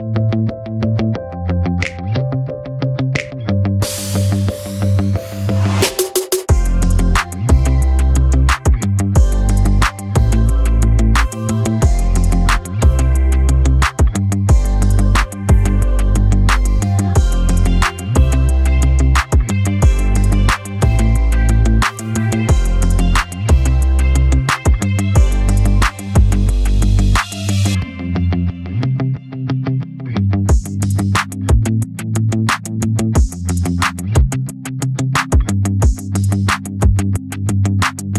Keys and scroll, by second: 0.6 v, 11.7 Escape, 20.1 Escape.